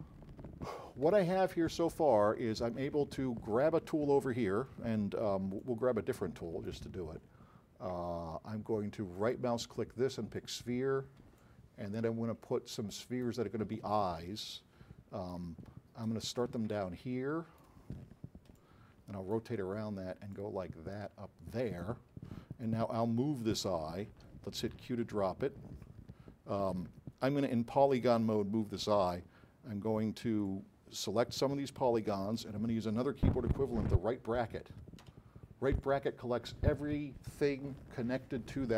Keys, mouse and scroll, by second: 0.7 alt+click, 5.6-7.0 alt+drag, 9.3 right click, 11.4-12.6 alt+drag, 20.4-21.9 drag, 22.8 alt+click, 24.9 q, 30.5-32.5 drag, 35.1 ].